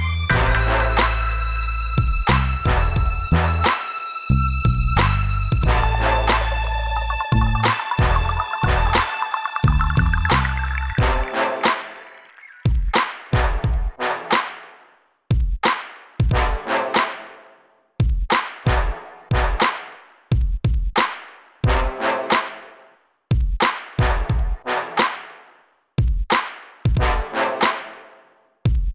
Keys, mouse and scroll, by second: 0.4 scroll up 2, 1.3 click, 2.0 click, 3.1 click, 4.0 click, 4.5 click, 5.3 click, 5.7 click, 6.2 scroll down 2, 7.4 click, 10.5 click, 12.7 click, 13.7 click, 15.2 click, 15.3 click, 16.3 scroll up 2, 18.4 click, 19.3 click, 20.5 click, 21.8 click, 27.2 middle click, 28.2 scroll up 3, 28.7 click.